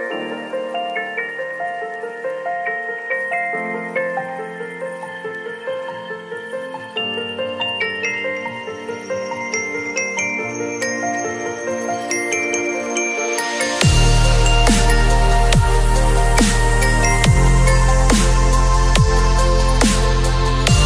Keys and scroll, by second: 3.9 b, 4.7 v, 10.4 ctrl+a, 10.6 ctrl+c, 10.9 ctrl+w, 12.3 ctrl+v, 12.8 ctrl+t.